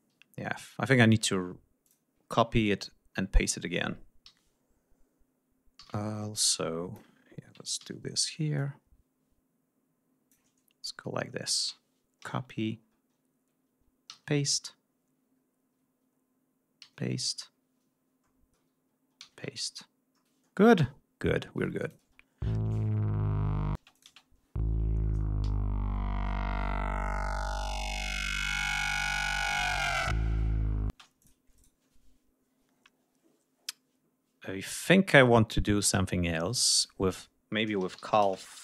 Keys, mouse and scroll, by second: 0.3-0.7 ctrl+scroll up 2, 1.8-2.6 drag, 2.8-3.6 ctrl+scroll up 5, 4.3 r, 5.8 d, 5.9 ctrl+scroll up 2, 6.5 ctrl+click, 7.2 ctrl+scroll down 2, 7.8 ctrl+r, 8.6-10.5 drag, 10.6-10.9 ctrl+scroll up 2, 11.1-11.4 ctrl+scroll down 2, 12.1 ctrl+scroll down 2, 12.2 ctrl+c, 12.8 ctrl+scroll up 2, 14.1 ctrl+v, 14.5 ctrl+scroll down 2, 15.3-15.6 ctrl+scroll up 2, 16.8 ctrl+v, 17.3-17.8 ctrl+scroll down 2, 18.0-18.4 ctrl+scroll up 2, 19.2 ctrl+v, 19.6-20.4 ctrl+scroll down 4, 21.8 click, 22.0 space, 23.8 space, 24.0 click, 25.4 g, 30.9 space, 31.2 click, 31.6 right click, 36.7 click, 37.5-38.6 typing.